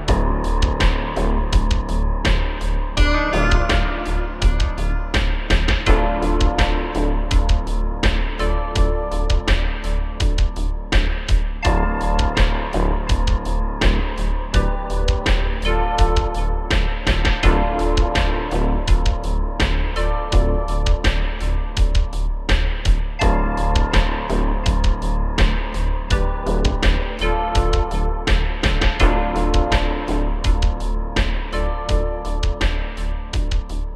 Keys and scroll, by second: 3.8 d, 4.4 d, 5.4 shift+d, 8.8 space, 8.9 space, 10.8 space, 10.9 space, 11.0 space, 14.2 space, 18.5 typing, 21.6-23.0 typing, 24.2 typing.